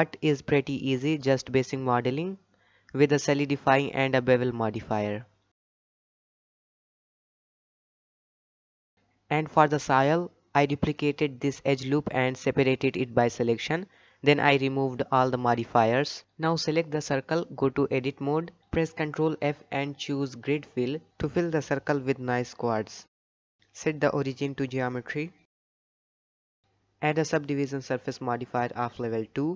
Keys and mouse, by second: 0.5 shift+middle drag, 0.8 drag, 1.3 middle click, 2.0 click, 2.4 Tab, 3.8 click, 4.3 alt+a, 4.6 middle click, 6.1-7.3 middle drag, 7.5 Tab, 9.0 Tab, 10.0 alt+click, 10.8 shift+d, 11.6 p, 12.4 Tab, 14.0 click, 15.4 Tab, 15.8 middle click, 16.4 a, 18.1 ctrl+f, 21.2 middle click, 23.5 Tab, 24.5-25.9 right drag, 27.0-29.0 drag.